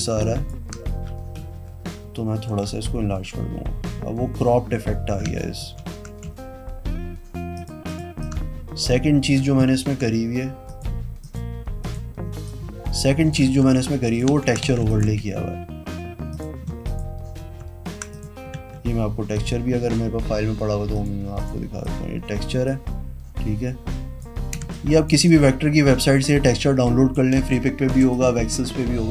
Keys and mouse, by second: 1.6 Down, 1.8 Down, 1.9 Down, 2.1 Down, 2.4 Down, 2.6 Down, 3.4 Down, 4.7 Down, 5.0 Down, 5.8 ctrl+KP_Subtract, 6.4 v, 7.7 click, 8.1 click, 8.4 click, 9.9 ctrl+z, 10.9 click, 11.4 click, 12.0 click, 12.7 shift+click, 13.8 ctrl+a, 14.3 click, 14.7 ctrl+d, 14.9 z, 15.1 alt+click, 15.4 v, 16.5 click, 17.0 shift+click, 18.3 click, 19.5 click, 21.1 click, 21.6 click, 22.0 click, 22.8-24.4 drag, 24.8 space, 24.9 click, 25.5 shift+click, 27.7 space.